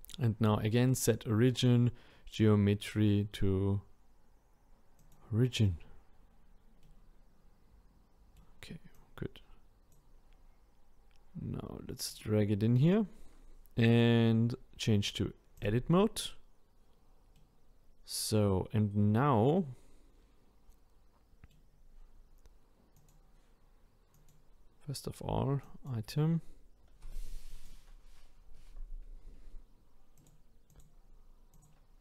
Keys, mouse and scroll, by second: 6.8-8.9 middle drag, 8.9 click, 12.1 click, 13.9-17.4 drag, 17.4-20.4 middle drag, 23.0 click, 24.1-25.9 drag, 27.5-32.0 drag.